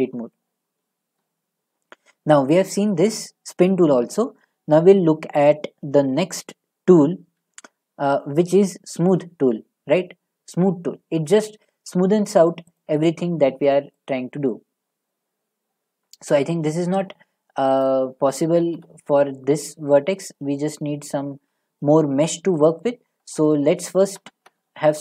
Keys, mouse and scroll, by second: 1.2 middle click, 1.5 middle click, 12.8-21.0 drag, 18.6 ctrl+z, 21.0 middle click, 21.3 middle click, 21.4 middle click, 22.2 middle click, 24.9 ctrl+r.